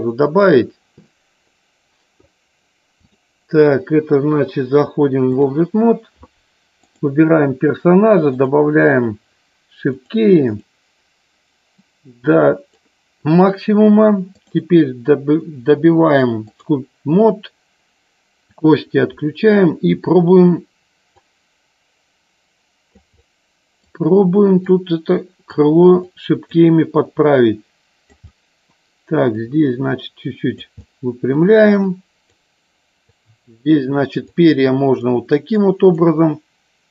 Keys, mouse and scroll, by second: 0.3 click, 3.1-5.6 drag, 6.8 click, 10.1 click, 11.9 click, 14.6-16.8 drag, 18.6 click, 19.3 middle click, 21.3-23.0 drag, 23.2 middle click, 24.8 click, 26.2 click, 27.2-28.3 drag, 28.5 middle click, 29.6-30.7 drag, 31.0 middle click, 32.0 click, 33.2 click, 34.3 click, 35.7 click.